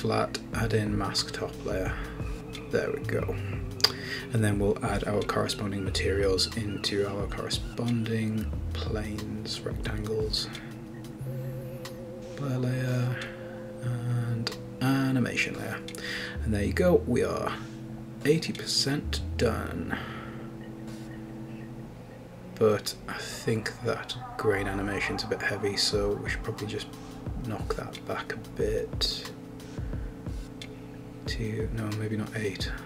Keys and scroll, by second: 32.6 super+a.